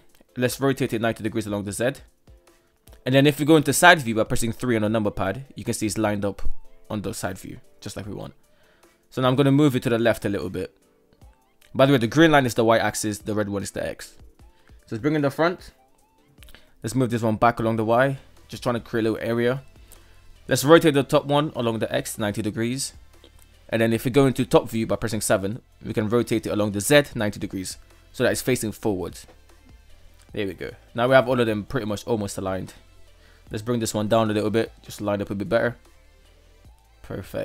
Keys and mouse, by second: 0.2 r, 4.7 KP_3, 8.3-8.6 middle drag, 9.2 g, 13.6 click, 14.9-15.4 middle drag, 16.2 g, 18.3 drag, 19.4-20.8 right drag, 20.8 r, 24.2 KP_7, 27.4 r, 29.8 ", 31.2 middle click, 31.4 middle click, 32.6 g, 34.2-37.4 middle drag.